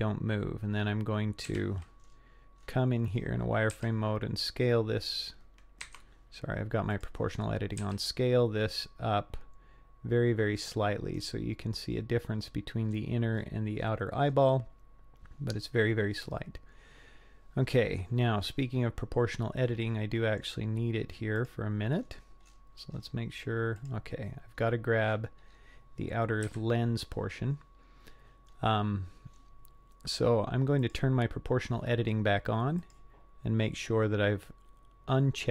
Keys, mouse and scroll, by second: 0.7-1.0 scroll up 4, 1.5 z, 2.1-2.8 scroll up 6, 2.9 scroll down 1, 3.1-3.7 scroll up 2, 4.0 s, 6.9 click, 7.8 s, 11.1-11.7 scroll up 4, 11.9 scroll up 2, 12.4-15.5 scroll down 16, 15.5 scroll up 1, 19.6 middle click, 21.4 click, 22.0-23.3 scroll up 9, 23.9 click, 24.6-26.4 scroll down 8, 26.4 scroll down 1, 26.5 KP_3, 27.6-27.9 scroll down 2, 28.5-29.1 scroll up 2, 29.7-30.4 scroll down 1, 30.8 click, 32.8-35.5 drag.